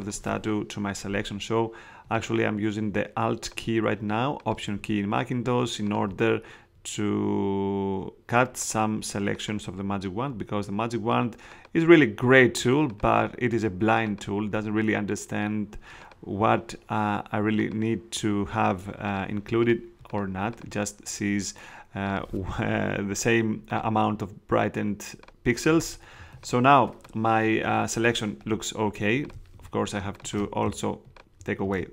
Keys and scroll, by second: 26.1 alt+space, 29.5 space, 31.6 shift+space.